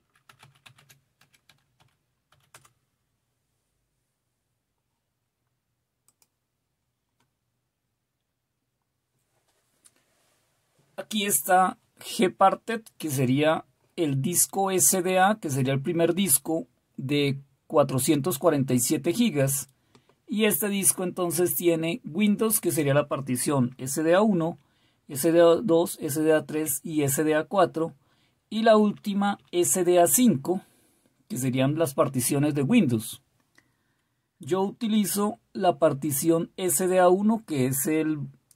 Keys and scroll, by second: 0.0-2.3 typing, 2.5 Return, 24.4 Down, 25.4 Down, 26.5 Down, 28.5 Down, 28.7 Down, 28.9 Down, 29.1 Down, 29.2 Down, 29.4 Down, 29.5 Down, 35.1-36.2 Up.